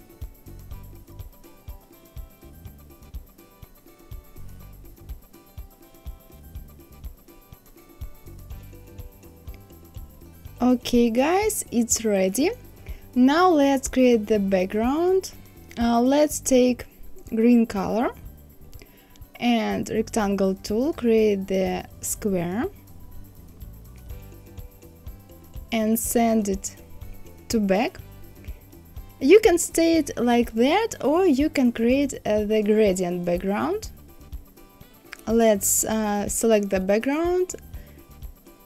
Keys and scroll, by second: 4.2 KP_2, 4.5 KP_0, 4.6 KP_1.